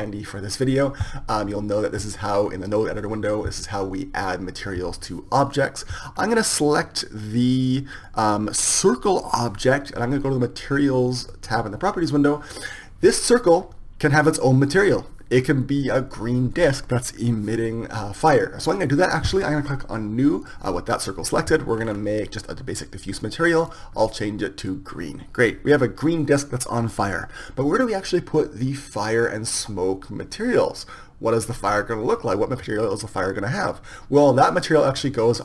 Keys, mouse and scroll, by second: 8.5-11.7 middle drag, 11.7-13.6 drag, 20.3-25.5 drag.